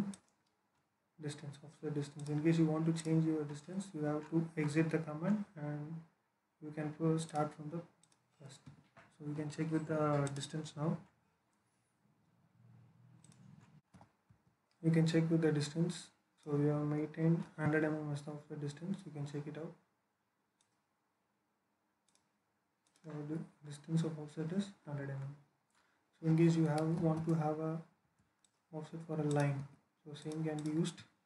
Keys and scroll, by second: 8.5 Escape, 26.8 l, 27.9 space, 29.4 Escape.